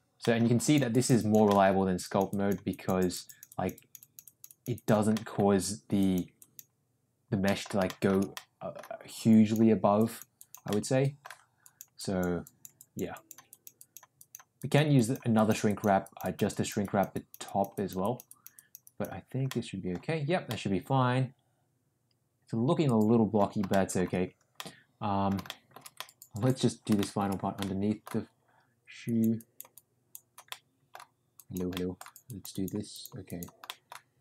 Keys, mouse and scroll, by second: 0.2 middle click, 0.6 click, 0.9 click, 1.2 click, 1.5 middle click, 2.0 click, 2.3 click, 2.7 click, 3.0 click, 3.3 click, 3.5 click, 3.7 click, 4.2 click, 4.7 click, 5.1 middle click, 5.9 click, 6.4 click, 7.4 middle click, 7.8 shift+middle click, 8.3 middle click, 9.2 click, 9.9 click, 10.4 click, 10.7 middle click, 11.6 click, 12.0 click, 12.4 click, 12.8 click, 13.1 click, 13.5 click, 13.8 click, 14.2 click, 14.6 click, 15.0 click, 15.4 click, 15.7 click, 16.0 click, 16.2 click, 16.5 click, 16.8 click, 17.2 click, 17.5 click, 17.7 click, 18.0 click, 18.3 click, 18.6 click, 18.9 click, 19.4 middle click, 20.4-23.4 middle drag, 23.7 shift+middle click, 24.5 middle click, 25.4 shift+middle click, 25.9 middle click, 26.9 shift+middle click, 27.5 middle click, 29.0 click, 29.3 click, 29.7 click, 30.4 middle click, 31.3 click, 31.7 middle click, 32.2 click, 32.5 click, 32.9 click, 33.2 click, 33.6 middle click.